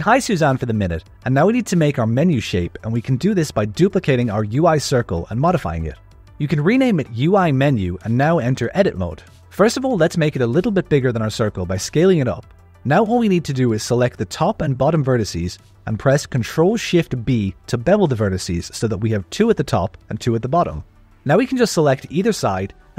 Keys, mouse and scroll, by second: 0.4 ctrl+middle click, 1.1 shift+middle click, 1.7 click, 2.5 h, 4.3 KP_7, 4.9-5.9 scroll up 4, 5.9 click, 6.2 alt+a, 6.2 ctrl+middle click, 6.6 shift+d, 7.9 F2, 10.2 Tab, 10.2 a, 10.4 s, 13.7 alt+a, 15.2-16.5 drag, 17.2 ctrl+shift+b, 21.0-21.5 scroll down 4, 21.6 alt+a, 21.8 click, 22.2 g, 22.2 o.